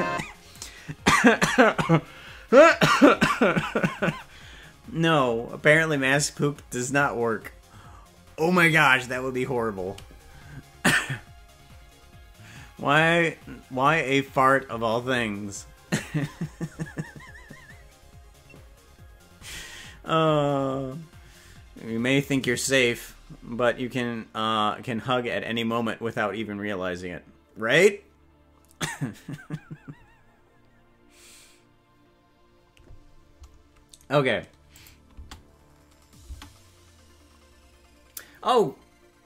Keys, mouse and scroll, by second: 34.7 click, 35.2 space, 36.4 space.